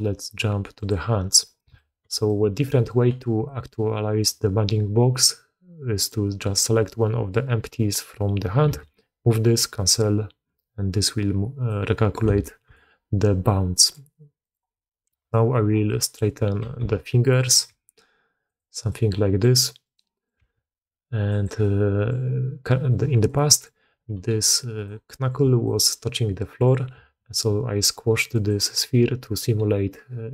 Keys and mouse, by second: 1.0 middle click, 1.7-2.0 shift+drag, 2.2-2.6 middle drag, 5.9 click, 8.6 g, 11.6-12.1 middle drag, 12.3-12.7 shift+middle drag, 13.7 middle click, 14.4 click, 15.0 KP_Decimal, 15.8-16.1 drag, 16.6 r, 17.6 r, 18.8-19.3 drag, 20.0 drag, 20.4 r, 21.5-22.0 drag, 23.1 click, 23.4 click, 24.0 g, 25.0 drag, 25.5 drag, 26.4 click, 26.9 g.